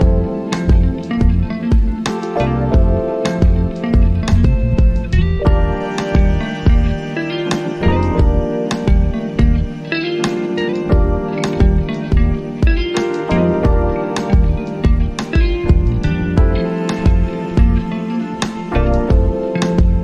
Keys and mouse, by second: 4.0 click, 10.3-15.6 drag, 15.6-20.0 drag.